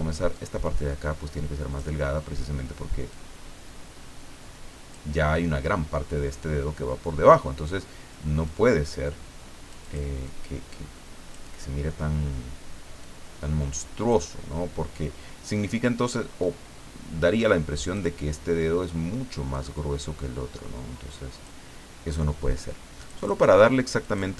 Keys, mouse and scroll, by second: 0.3-1.9 drag, 3.1-5.1 drag, 8.4-10.1 drag, 10.3-11.7 drag, 13.0-14.4 drag, 16.4-18.1 drag, 19.5-21.6 drag, 23.0 click, 24.0 click.